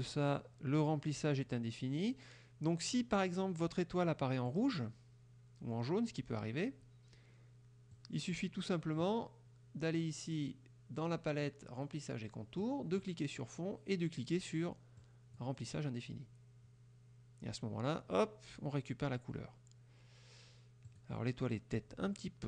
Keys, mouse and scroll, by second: 4.6 click, 8.0 click, 12.7 click, 15.1 click, 20.9 click.